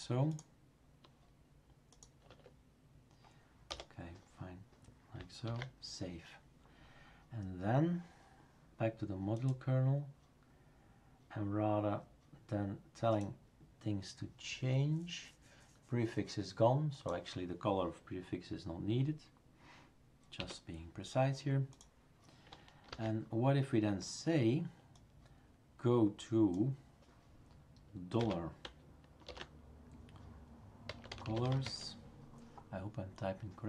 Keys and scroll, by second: 2.3 Tab, 3.7 BackSpace, 5.5 ctrl+s, 20.4 typing, 22.9 ctrl+s, 28.2 typing, 29.2 typing, 30.6-32.1 typing.